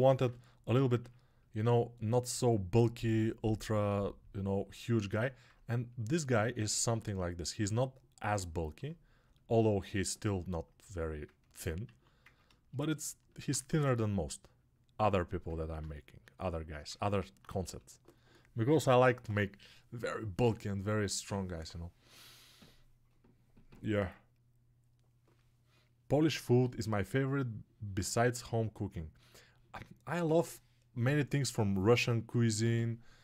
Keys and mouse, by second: 5.0-13.2 alt+drag, 17.1-33.2 drag.